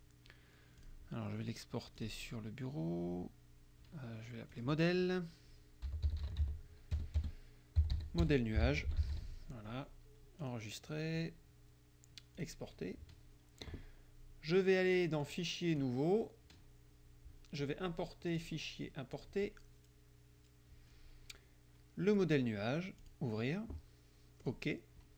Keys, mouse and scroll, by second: 0.8 click, 2.0 click, 4.6 click, 5.7-9.7 typing, 10.5 click, 12.4 click, 15.3 click, 15.8 click, 18.3 click, 19.2 click, 22.1 click, 23.0 click, 24.5 click.